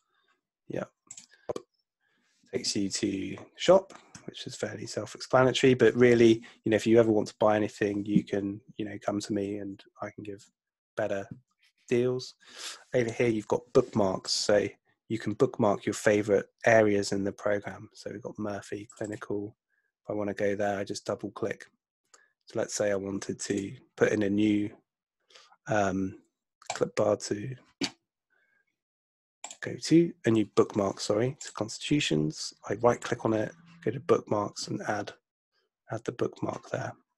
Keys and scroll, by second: 9.5 super+Tab.